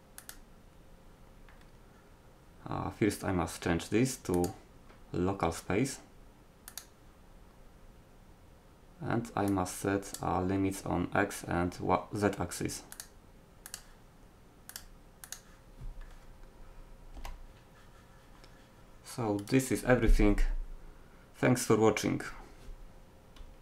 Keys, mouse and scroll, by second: 4.4-6.3 drag, 9.5 click, 11.4-13.0 middle drag, 17.1-20.0 middle drag, 17.2 g.